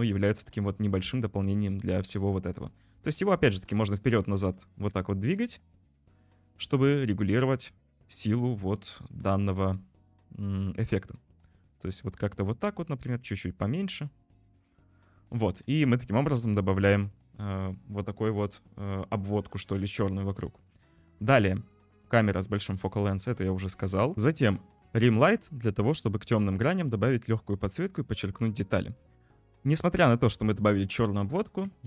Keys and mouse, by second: 0.1 click, 1.2 click, 3.0 g, 4.7 g, 7.8 g, 15.5 ctrl+s, 22.4 click, 24.1 ctrl+shift+F1, 26.0-28.5 drag, 30.4 shift+middle drag, 30.6 click.